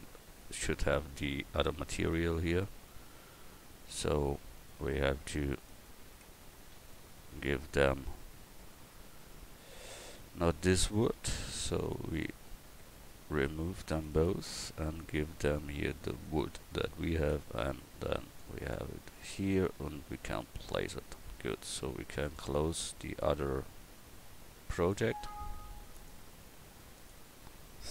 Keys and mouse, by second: 3.4 click, 4.4 Tab, 5.2 Tab, 6.2 Tab, 6.7 a, 12.8 Tab, 17.3 Tab, 17.8 Tab.